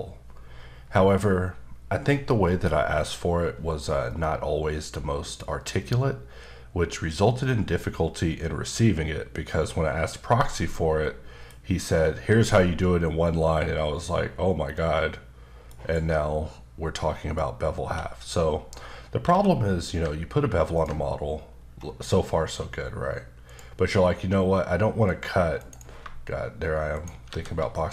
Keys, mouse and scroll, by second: 11.9-12.7 scroll down 1, 12.7 middle click, 18.5-19.1 scroll up 1, 19.3 q, 20.7 ctrl+click, 21.5-22.4 scroll up 5, 22.9-23.4 scroll up 2, 23.4 click, 25.0 click, 25.6 right click, 26.9 shift+right click, 27.3 shift+a.